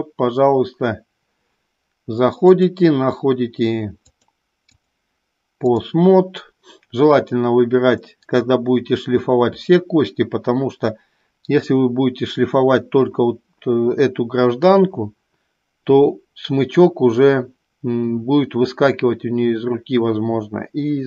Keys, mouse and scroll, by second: 3.3 click, 4.8-6.4 drag.